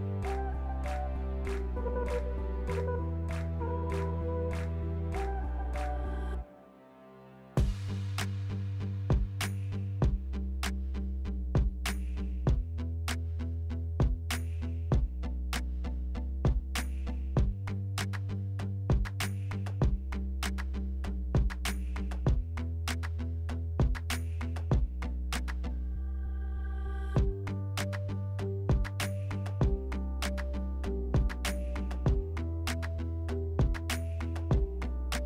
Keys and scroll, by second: 1.3-2.2 typing, 7.7 2, 12.6 s, 15.5 4, 17.1-17.9 typing, 19.4 s, 21.1 3, 34.4 s.